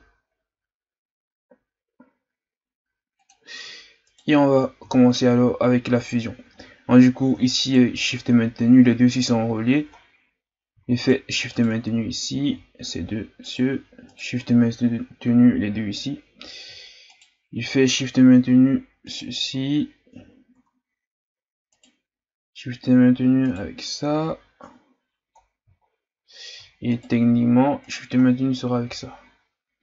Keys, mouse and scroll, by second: 4.1 right click, 4.9-5.9 shift+scroll up 2, 6.1-6.5 scroll down 1, 6.5-7.6 scroll up 1, 7.6 shift+right click, 10.0-10.3 scroll down 1, 10.3 scroll up 1, 11.0 shift+right click, 11.6 shift+right click, 12.1-13.4 scroll down 3, 13.4 shift+right click, 14.1 shift+right click, 17.1 shift+right click, 19.1 shift+right click, 21.7 shift+right click, 23.4 shift+right click, 25.4-26.9 scroll down 3, 26.9 shift+right click, 27.8 shift+right click, 28.2-29.8 scroll down 5.